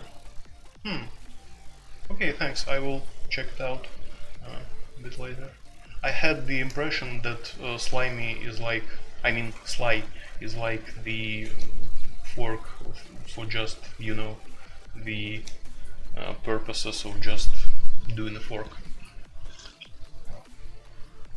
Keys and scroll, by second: 13.4-15.1 typing.